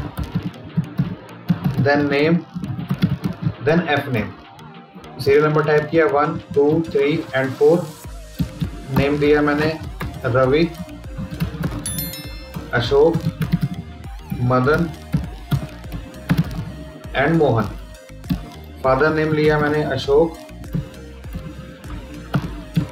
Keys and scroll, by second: 0.2 Tab, 1.8 Tab, 4.0 Down, 4.9 Left, 5.8 Down, 6.3 Down, 6.7 Down, 7.4 Up, 8.2 Right, 9.2 Left, 10.6 Down, 12.4 Down, 14.2 Down, 17.1 Up, 18.2 Right, 21.2 Down.